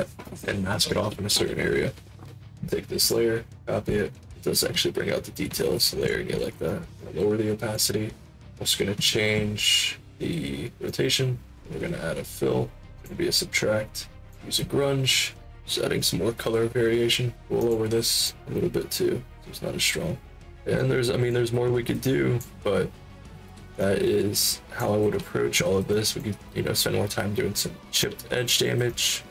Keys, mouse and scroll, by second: 2.9 click, 3.6 middle click, 6.6 alt+click, 7.3 click, 8.4 click, 10.8 click, 12.9 click, 15.3 middle click, 15.4-17.3 drag, 17.5 click, 18.2-20.3 drag, 20.7 alt+click, 22.0 alt+click, 23.7-24.7 alt+drag, 25.9 alt+click, 28.0 alt+click, 28.8 alt+click.